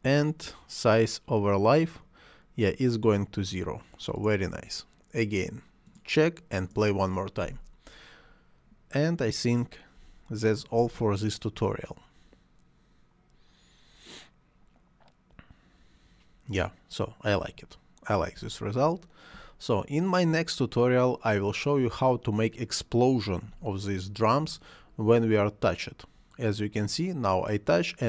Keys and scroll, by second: 10.7 space, 18.3 space, 23.4 space.